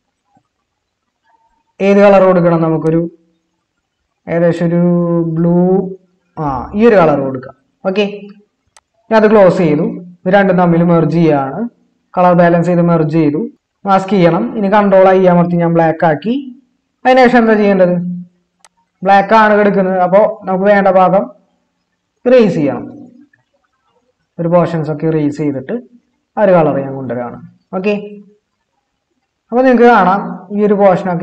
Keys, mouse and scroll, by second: 11.5 ctrl+e, 13.5 ctrl+z, 15.6 ctrl+i.